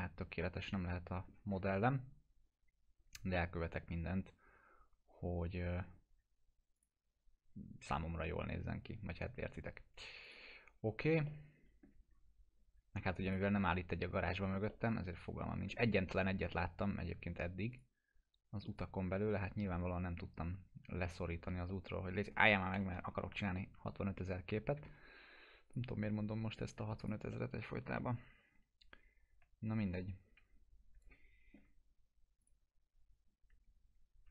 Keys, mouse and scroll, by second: 1.5-3.2 scroll down 2, 3.4-5.8 alt+middle drag, 6.8 click, 8.5 scroll down 1, 10.3 click, 10.8 scroll down 1, 11.3-11.9 alt+middle click, 12.1 scroll down 1, 13.3 ctrl+click, 13.8 scroll up 1, 14.7-15.9 middle drag, 16.0 w, 16.3 scroll down 1, 16.6 middle click, 17.7 ctrl+click, 21.1-21.7 scroll down 2, 21.7-22.3 alt+middle click, 22.7 p, 23.2 scroll down 1, 23.6 middle click, 24.8 alt+q, 25.7 click, 26.2 scroll up 1, 27.0 click, 27.3 middle click, 27.7 scroll down 1, 28.0-31.7 alt+middle drag, 32.4 click, 33.2 scroll up 1.